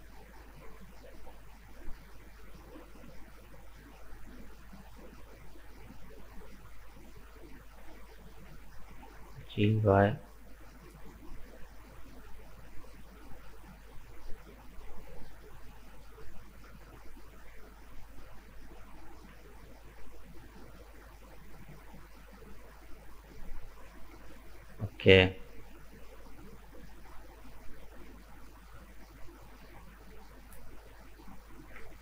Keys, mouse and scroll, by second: 2.5 right click, 2.9-3.2 scroll up 2, 3.2-6.1 middle drag, 6.1 click, 6.8 right click, 7.3-9.4 middle drag, 9.4 g, 12.1 middle click, 12.9-13.9 scroll down 4, 13.9 Tab, 14.0 right click, 14.3-17.3 middle drag, 23.2-23.6 scroll down 2, 23.6-25.4 middle drag, 25.4-25.9 scroll up 2, 25.9 right click, 26.1 Tab, 26.3-29.3 middle drag, 30.2 Tab, 30.4 right click.